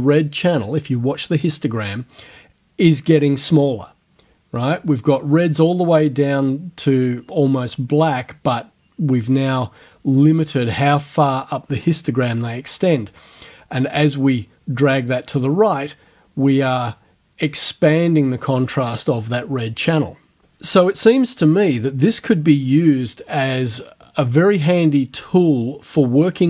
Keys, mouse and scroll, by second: 10.2-18.7 drag.